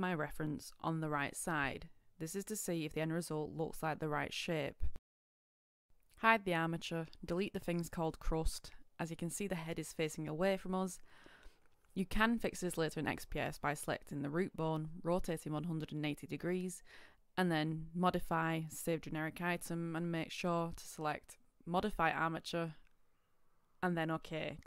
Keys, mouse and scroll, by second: 6.6 shift+click, 7.0 shift+click, 7.8 shift+Delete, 8.0 Return, 9.1-9.5 shift+scroll, 9.5-9.9 scroll up 1, 10.4 right click, 11.2 KP_6, 14.5-15.0 shift+scroll, 15.3 scroll up 1, 16.0 scroll down 1, 17.5 click, 19.1 space, 20.3 BackSpace, 22.1 typing, 23.5 BackSpace.